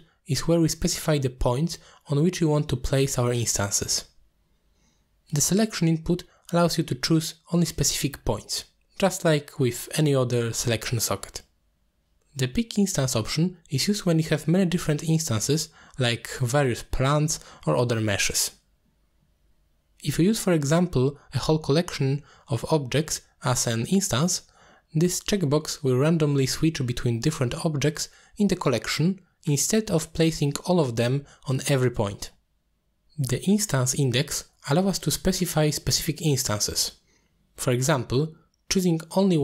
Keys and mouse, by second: 0.3 click, 1.2 click, 1.8 click, 2.2 click, 3.8 click, 4.5 middle click, 6.4-6.8 drag, 7.2 click, 15.0 click, 15.6 click, 21.2 middle drag, 21.7-22.0 middle drag, 24.6 click, 25.8-26.2 middle drag, 26.9-27.4 middle drag, 28.1 click, 29.1-30.7 drag, 30.7-31.1 middle drag, 31.6 shift+middle drag, 32.2-33.0 middle drag, 36.6 shift+a.